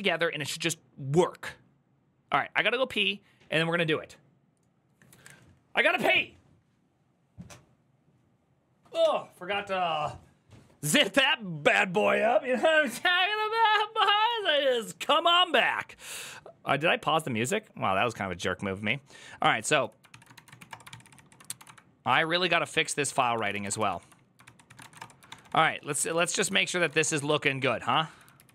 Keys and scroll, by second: 19.6-21.7 typing, 21.9 Return, 22.4 ctrl+n, 22.9-24.7 typing, 24.2 ctrl+c, 24.7 Return, 25.0 ctrl+d, 25.2 ctrl+d, 25.4 ctrl+d, 25.8 ctrl+d, 25.8-27.3 typing, 26.2 ctrl+u, 27.4 ctrl+d.